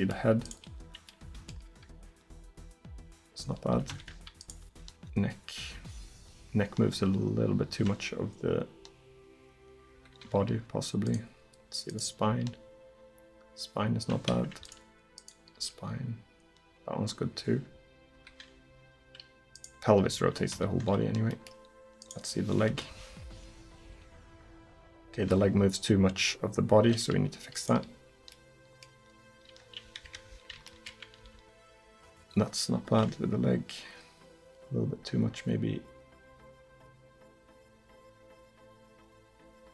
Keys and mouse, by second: 1.7 r, 2.2-6.3 middle drag, 4.7 r, 10.6-16.9 middle drag, 12.3 r, 15.6 r, 18.7-19.6 middle drag, 20.1 r, 21.3 click, 22.7 KP_1, 23.9 r, 25.9 middle click, 26.1 middle click, 27.6-30.1 middle drag, 30.1 KP_3, 31.2 r.